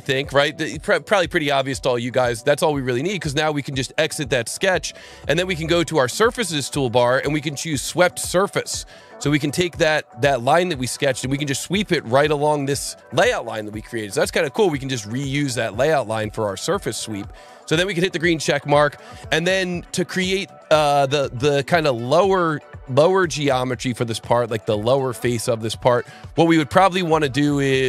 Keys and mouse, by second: 3.9 click, 6.2 click, 7.9 click, 9.3 click, 10.7 click, 12.0 click, 18.0 click, 21.6 click, 23.1 click, 24.0 click, 25.8 click.